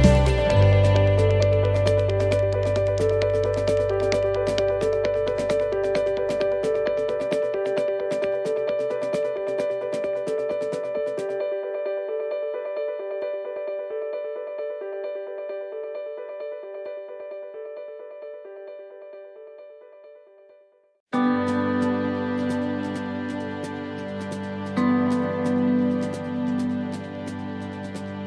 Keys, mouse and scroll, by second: 4.6 right click, 5.7 click, 7.7 middle click, 8.7 middle click, 12.0 click, 12.9 right click, 14.3 click, 19.5-19.9 scroll down 2, 19.9 middle click, 20.6 shift+middle click, 20.9-21.3 shift+scroll up 3, 21.3 middle click, 22.0 right click, 23.5 right click, 23.7 shift+right click, 24.6 click, 25.9 middle click, 27.5 click.